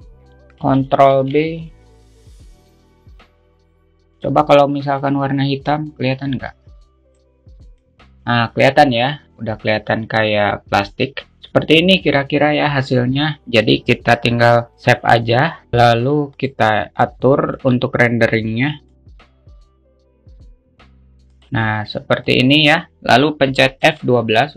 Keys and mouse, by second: 1.6 ctrl+b, 4.2 click, 5.4 click, 16.4 click, 16.8 drag, 17.3-19.0 drag, 19.8-21.2 drag.